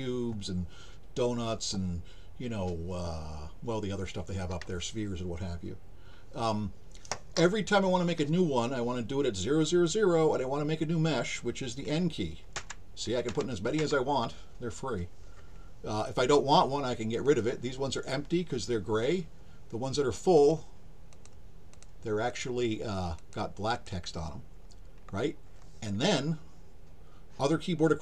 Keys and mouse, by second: 17.2 click, 20.4 click, 21.1 click, 21.7 click, 22.3 click, 23.2 click, 23.7 click.